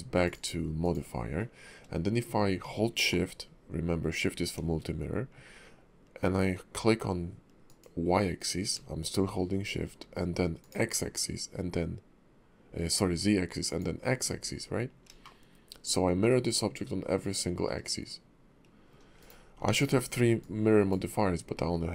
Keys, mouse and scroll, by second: 0.2 click, 7.6 shift+click, 10.6 shift+click, 13.6 shift+click, 15.2 middle click, 19.6 ctrl+`.